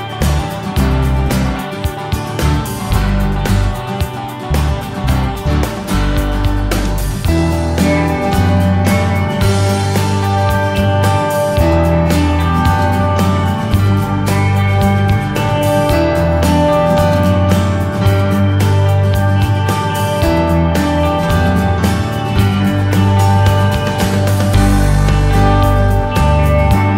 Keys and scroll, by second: 9.3 s, 12.7 w, 16.1 s, 19.5 w, 25.7 w.